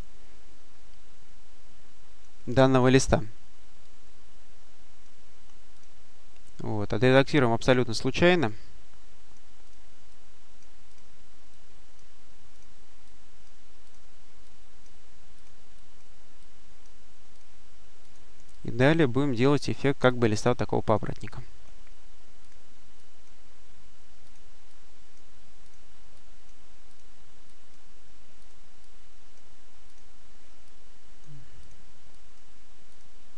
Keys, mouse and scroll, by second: 2.6 click, 3.7-5.4 drag, 5.6 click, 6.9-8.4 drag, 9.5 click, 10.7 click, 11.4 click, 12.4 click, 13.7 click, 14.3 click, 15.2 click, 16.3 click, 17.2 click, 17.9 click, 19.4 click, 20.7 click, 22.3 click, 22.8 click, 23.3-23.9 scroll up 1, 24.1 click, 25.5 click, 27.3 click, 28.3 click, 29.7 click, 30.5-32.0 drag, 32.8 click.